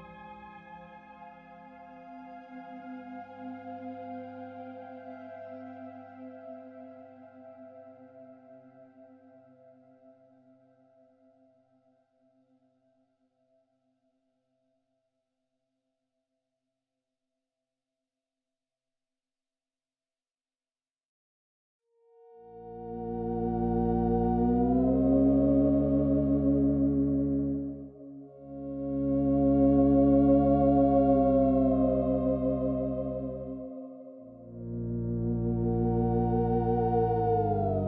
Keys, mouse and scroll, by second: 0.4 click, 3.1 click, 4.6 click, 6.2 click, 13.3 click, 14.0 click, 15.2 click, 16.5 click, 19.5 click, 23.2 click, 25.2 click, 26.0 click, 30.6 click, 33.2 click, 35.2 click, 35.8 click.